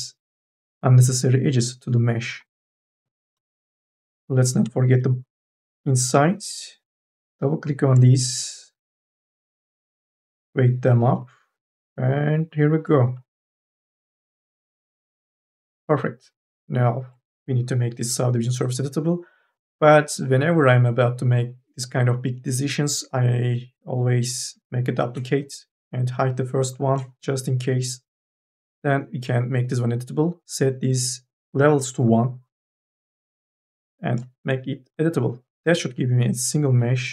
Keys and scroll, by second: 3.8 e, 5.5 q, 34.2 c, 36.9 Delete.